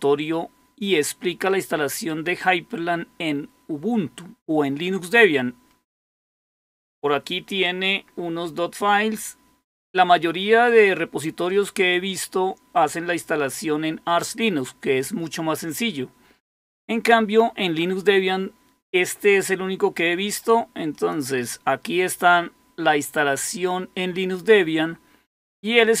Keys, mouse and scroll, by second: 5.5-6.3 scroll down 2, 6.3-6.9 scroll down 1, 6.9-7.8 scroll down 1, 7.8-16.3 scroll down 1, 16.3-17.6 scroll down 1, 17.6-18.6 scroll down 1, 18.6-20.2 scroll down 1, 20.2-20.9 scroll down 1, 20.9 click, 25.4-26.0 scroll down 2.